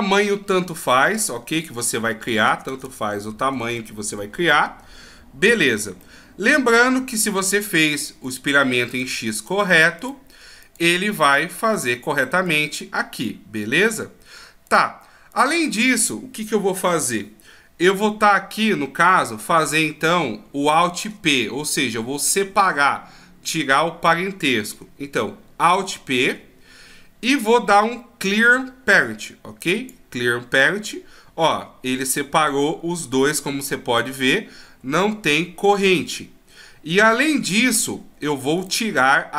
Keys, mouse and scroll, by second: 6.0 middle click, 8.3 right click, 8.9 right click, 9.4 right click, 10.0 right click, 11.7 right click, 12.5 right click, 13.8 right click, 26.1 alt+p, 31.4 g, 33.5-34.2 scroll up 1, 34.2-34.5 scroll up 3, 34.5 shift+scroll down 1, 34.9-35.7 shift+scroll up 1, 35.7 g, 38.6 right click.